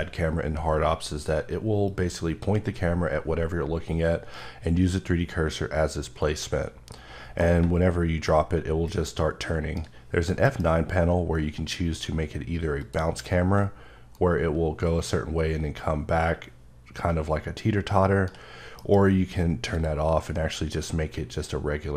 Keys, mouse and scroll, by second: 1.8 click, 2.3 click, 7.6 shift+Num_Lock, 7.6 click, 8.2 right click, 10.4 F9, 12.8 click, 14.1 right click, 18.7 F9, 19.7 click.